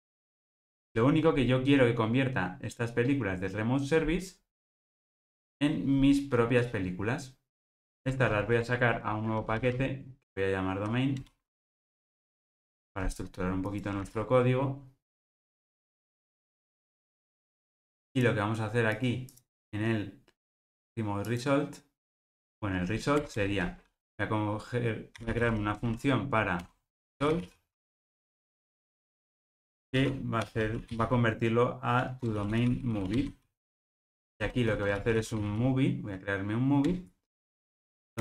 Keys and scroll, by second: 0.9 Return, 8.6 super+n, 14.0 super+x, 16.6 alt+super+[, 34.1 super+p, 36.9 Return.